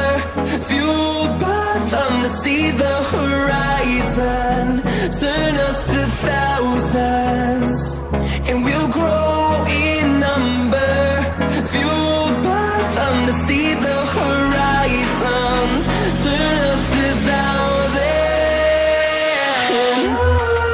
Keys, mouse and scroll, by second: 6.9 scroll down 1, 8.1 click, 8.4 scroll down 1, 8.6 scroll up 1, 9.0 scroll down 1, 9.3 click, 10.8 double click, 11.3 click, 11.7-12.5 typing, 13.0 click, 14.7 click, 14.7-15.5 scroll up 1, 15.5 click, 16.9 scroll down 1, 17.8 scroll up 1, 18.9 click, 19.5-19.9 scroll down 1, 20.5 click.